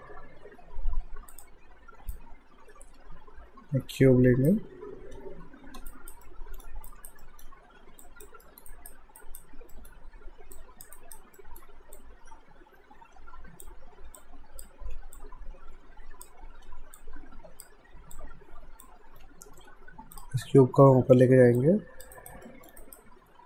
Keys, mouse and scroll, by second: 1.3 click, 2.1 shift+right click, 5.2 w, 5.9 alt+right click, 6.3 alt+middle click, 6.9 alt+right click, 7.2 alt+middle click, 8.0 click, 8.4 alt+middle click, 8.7 alt+right click, 9.8 alt+middle click, 10.6 click, 11.0 alt+right click, 11.4 alt+middle click, 12.0 click, 14.8 r, 15.2 click, 16.6 w, 17.0 click, 20.1 click, 21.2 w, 21.6 click, 22.2 alt+right click, 22.4 alt+middle click, 22.8 alt+right click.